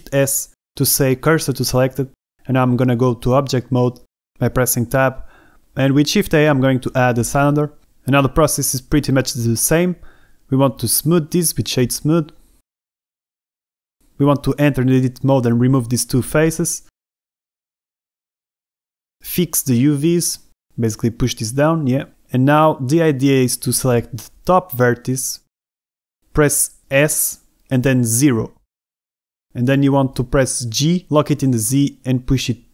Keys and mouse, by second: 1.0 shift+s, 5.1 Escape, 5.7 Tab, 7.4 shift+a, 11.9 space, 14.9 Tab, 16.1 click, 16.7 click, 17.8 click, 18.5 middle click, 18.9 Delete, 20.0 middle click, 21.3 ctrl+Tab, 21.9 b, 22.3 ctrl+z, 22.3 h, 22.5 g, 22.7 y, 23.4 click, 25.6 a, 26.1 b, 27.6 s, 28.2 KP_0, 29.0 KP_Enter, 29.8 g, 30.3 z, 30.7 KP_Subtract, 31.0 KP_1, 32.5 BackSpace.